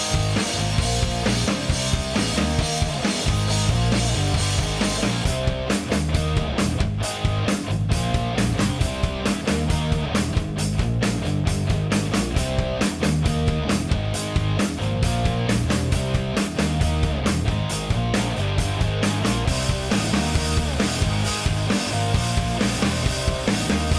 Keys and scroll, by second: 2.7 Escape, 5.5 0, 8.1 Return, 14.3 1, 15.3 0, 16.7 F1.